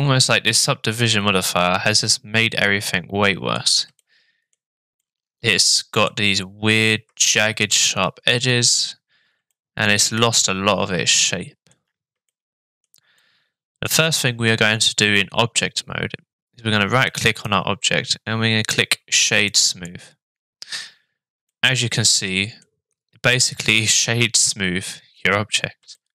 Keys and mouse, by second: 4.0-4.5 shift+middle drag, 5.0-6.1 middle drag, 7.2-7.6 shift+middle drag, 7.8-8.3 middle drag, 9.5-10.1 shift+middle drag, 10.3-11.7 middle drag, 12.3-13.9 shift+middle drag, 17.1 click, 21.5-22.6 middle drag, 23.3-23.7 shift+middle drag, 24.0-25.6 middle drag, 25.9-26.1 shift+middle drag.